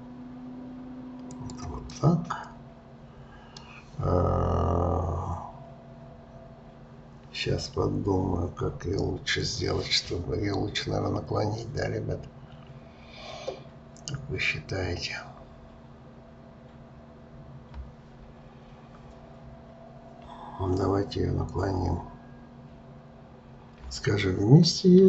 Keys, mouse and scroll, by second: 1.9-5.0 middle drag.